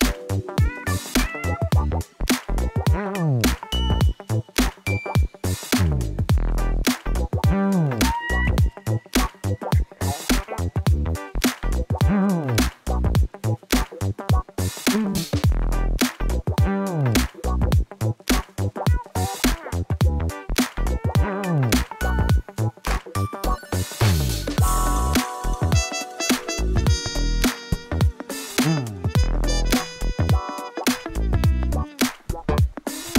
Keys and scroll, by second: 13.8 alt+a, 14.1 Tab, 14.6 alt+a, 18.9 Return, 21.1 Return, 22.2 ctrl+z, 23.1 shift+r, 24.2 7, 24.8 1, 25.4 g, 26.3 ctrl+z, 30.1 g, 31.9 g, 32.7 g.